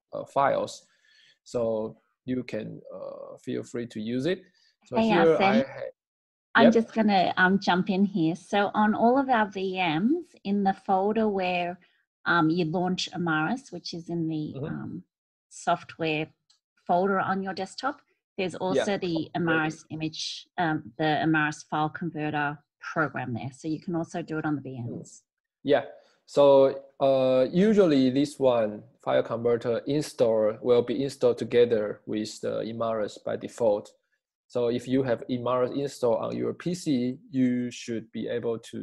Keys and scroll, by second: 3.1-4.4 scroll.